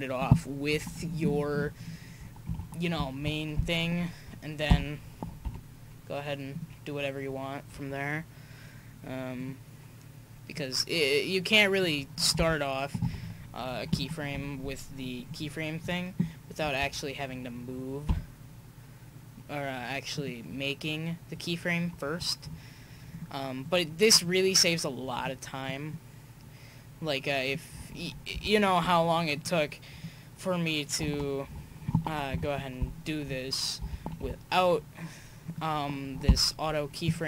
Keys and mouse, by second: 1.4 Right, 1.9 Right, 4.7 e, 4.7 r, 9.4-10.8 right drag, 10.6 click, 11.3 click, 12.4 i, 14.0 i, 15.3 click, 18.1 r, 23.1-25.9 right drag, 25.2-27.6 drag, 28.4 i, 30.0-30.5 drag, 32.3 Right, 33.8 r, 36.3 i.